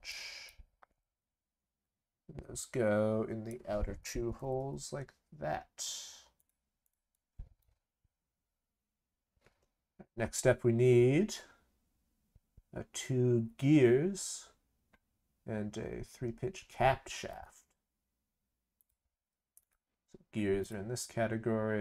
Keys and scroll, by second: 4.4 ctrl+c, 4.5 ctrl+v.